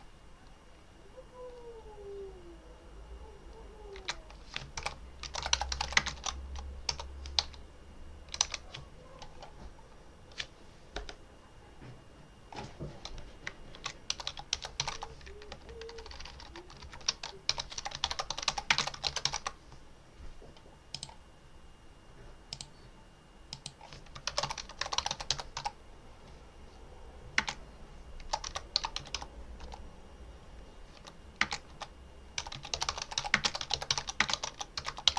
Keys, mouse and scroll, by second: 0.0-0.3 typing, 3.8-7.3 typing, 13.6-15.3 typing, 15.8 Left, 16.8 ctrl+shift+Right, 17.5 ctrl+a, 17.6 ctrl+r, 17.8 ctrl+a, 18.0 ctrl+e, 18.2 ctrl+t, 18.4 ctrl+r, 18.6 ctrl+space, 18.7 ctrl+v, 18.8 ctrl+a, 19.1 ctrl+u, 19.3 ctrl+e, 20.8 click, 22.4 click, 23.4 click, 23.9-25.9 typing, 27.2-35.1 typing.